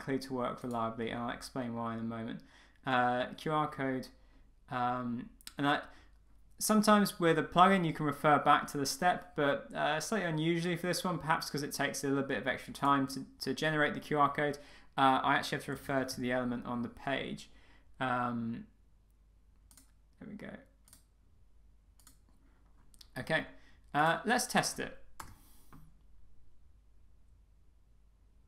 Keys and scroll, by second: 25.2 Return.